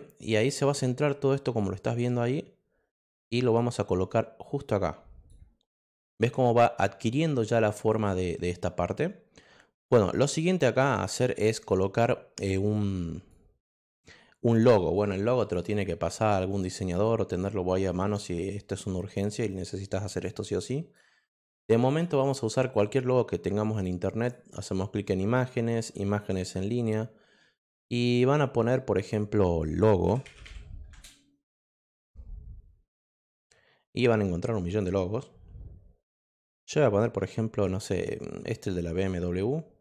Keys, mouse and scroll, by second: 2.2-5.2 drag, 5.7 click, 7.9 click, 11.6 click, 12.7 click, 13.6 click, 14.5 click, 15.4 click, 16.5 click, 17.2 click, 19.5 click, 21.8 click, 24.1 click, 26.0 click, 29.8-30.7 typing, 30.9 Return, 34.7 click, 38.9 click.